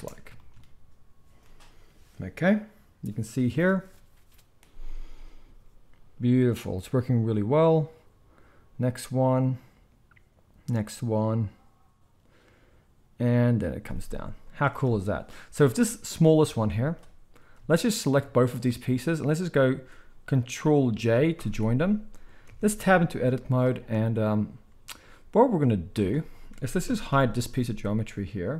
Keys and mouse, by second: 14.9 space, 16.5-18.4 middle drag, 17.4 z, 18.4-18.8 shift+drag, 18.8-22.8 middle drag, 21.6 ctrl+j, 22.5 Tab, 23.2 z, 26.8 ctrl+l, 27.1 h.